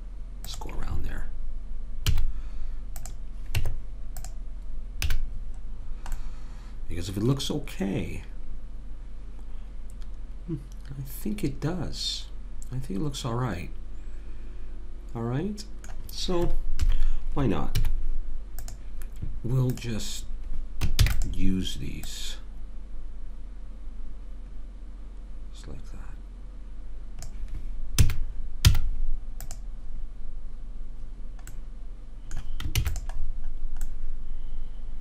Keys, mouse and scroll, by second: 2.0 z, 3.6 Tab, 5.1 a, 16.8 KP_3, 17.7 z, 19.7 click, 21.0 shift+d, 28.0 a, 28.7 z, 32.8 ctrl+s.